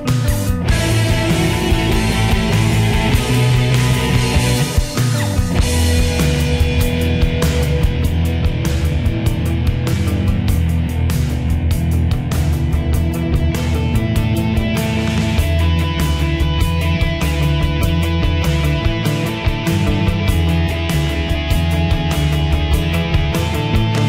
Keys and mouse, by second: 2.0 click, 8.2 shift+middle click, 12.6 click.